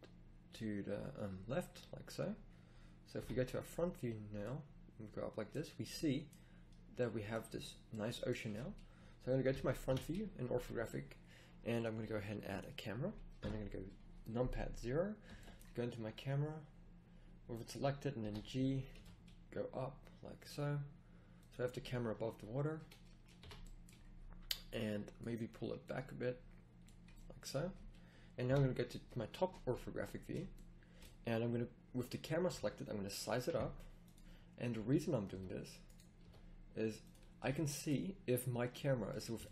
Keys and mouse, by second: 3.1 KP_1, 8.4 a, 9.5 KP_5, 9.9 KP_1, 13.4 KP_0, 15.2 g, 18.2 g, 23.4 a, 28.4 KP_7, 32.4 s, 34.7 s, 35.3 s, 36.1 s, 37.2-37.6 middle drag.